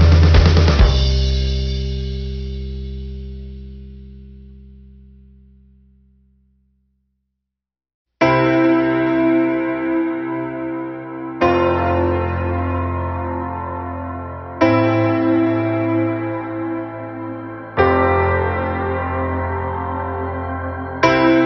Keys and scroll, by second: 15.5 ctrl+-, 18.2 ctrl+=.